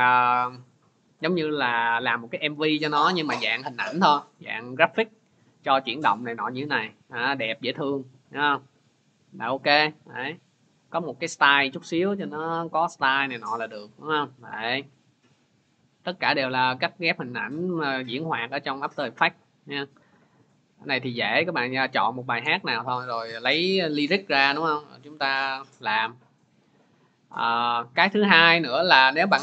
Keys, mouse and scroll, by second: 7.0-9.3 drag, 11.2 click, 25.9-29.4 drag.